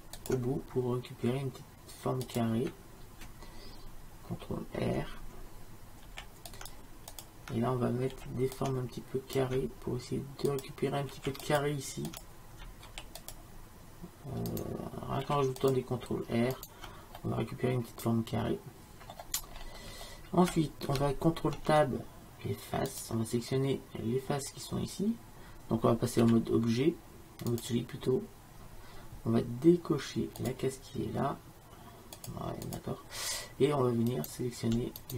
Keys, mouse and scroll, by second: 6.1 ctrl+r, 8.2 ctrl+r, 11.2 ctrl+r, 12.9 ctrl+r, 15.3 ctrl+r, 17.3 click, 19.7-23.1 middle drag, 21.6 ctrl+Tab, 26.3 z, 30.5-34.2 drag, 34.4-35.1 drag.